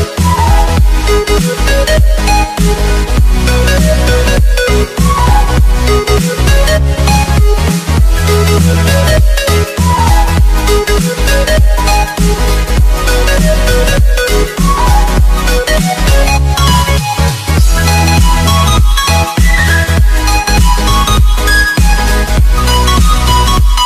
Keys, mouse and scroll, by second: 1.6 click, 7.8 Delete, 9.7 click, 10.6 click, 13.7 click, 14.7 Up, 15.1 Return, 17.8 click.